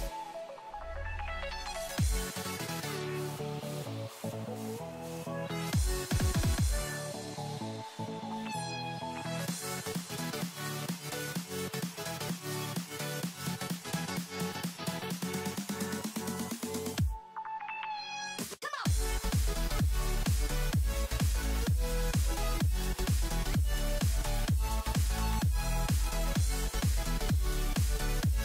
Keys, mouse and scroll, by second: 6.7 click, 8.1 click, 12.2 right click, 13.3-22.9 drag, 23.2 right click, 24.0-28.4 drag.